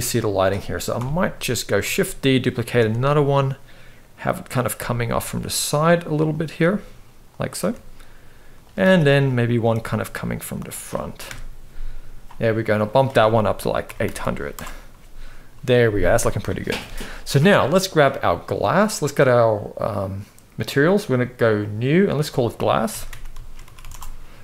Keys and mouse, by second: 0.6 KP_7, 1.5 shift+d, 2.5 r, 4.4 g, 6.3 g, 7.3 r, 8.5 shift+d, 9.5 r, 11.0 KP_0, 12.6-14.2 drag, 13.9 0, 16.5 ctrl+s, 17.6 click, 21.3 click, 21.8-23.6 drag, 23.5 s.